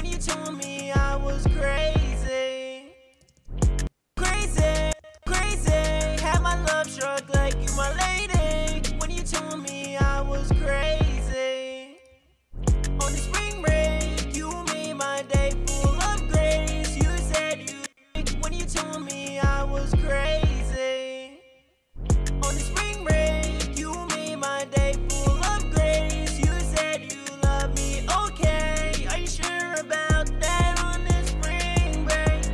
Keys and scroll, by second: 4.3 space, 5.1 super+s, 26.7 super+s.